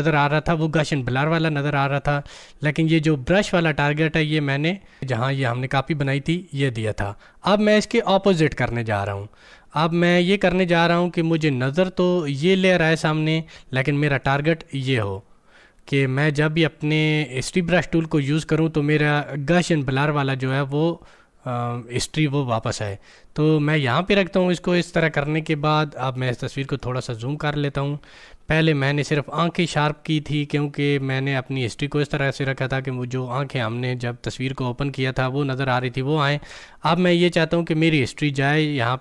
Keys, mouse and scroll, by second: 5.8 click, 14.1 click, 24.7-39.0 drag.